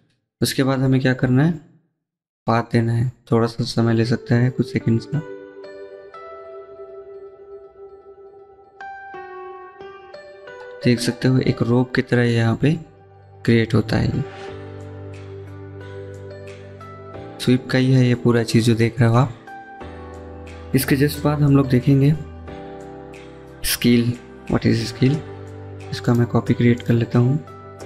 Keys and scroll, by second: 27.5 c.